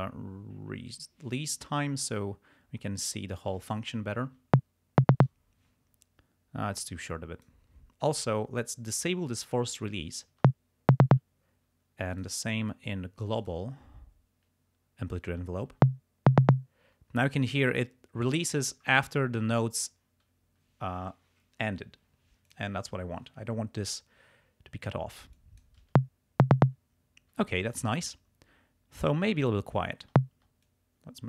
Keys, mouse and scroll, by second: 4.4 space, 5.3 space, 6.8 click, 9.4 click, 10.3 space, 11.2 space, 12.1 click, 13.4 click, 15.8 space, 16.8 space, 22.4 click, 25.3 click, 25.9 space, 26.7 space, 30.1 space, 30.6 click.